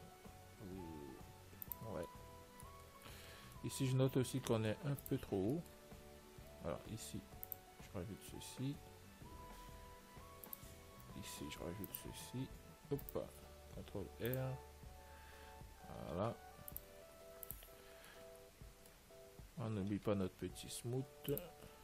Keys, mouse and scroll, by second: 2.2 scroll up 1, 2.3-7.8 middle drag, 5.2 ctrl+s, 7.5 ctrl+r, 11.9 ctrl+r, 13.3-15.1 right drag, 17.6 ctrl+s, 18.0 Tab, 18.2-21.6 middle drag, 21.6 click.